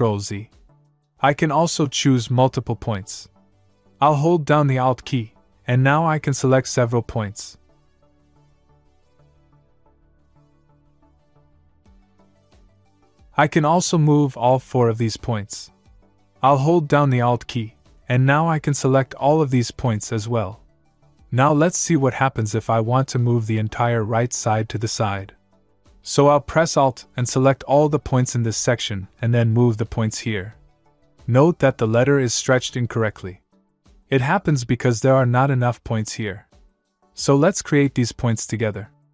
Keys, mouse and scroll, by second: 0.2 ctrl+z, 8.5 alt+click, 12.8 ctrl+z, 16.5 alt+Num_Lock, 17.0 alt+click, 22.2 ctrl+z, 26.5 alt+Num_Lock, 27.1 alt+click, 35.6 ctrl+z.